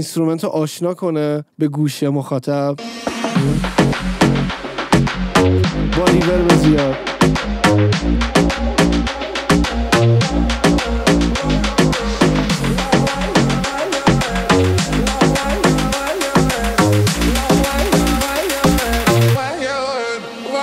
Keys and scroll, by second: 2.9 space.